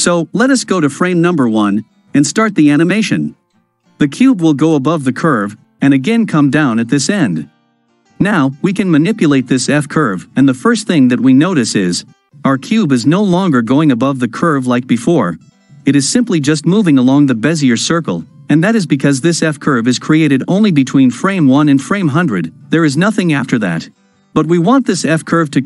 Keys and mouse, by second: 1.7 shift+Left, 2.6 space, 21.7 space.